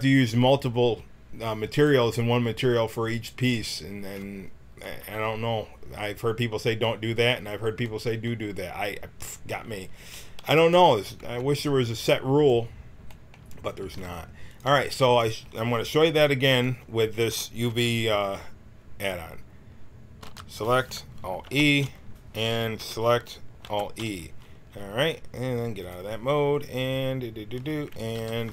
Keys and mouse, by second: 10.2 a, 11.2 b, 13.8 g, 20.2 l, 21.4 alt+e, 22.8 l, 23.6 alt+e, 28.1 l.